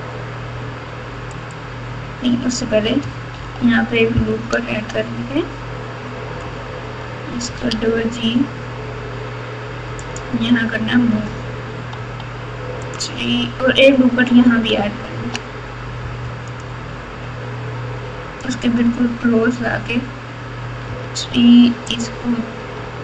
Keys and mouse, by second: 3.3 ctrl+r, 7.4 g, 11.9 3, 12.9-14.7 drag, 15.1 ctrl+r, 20.8 3, 21.8 click.